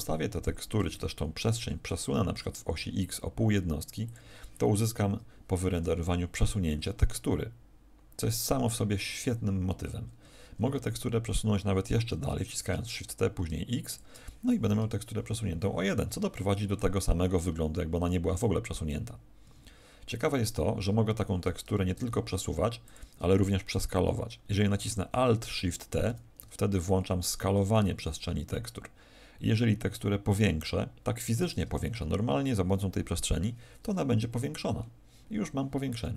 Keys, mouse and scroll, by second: 1.5 shift+t, 4.1 ctrl+click, 10.1 Escape, 12.3 shift+t, 13.9 ctrl+click, 19.4 Escape, 21.6 shift+t, 22.9 ctrl+click, 26.0 alt+shift+t, 31.5 ctrl+click.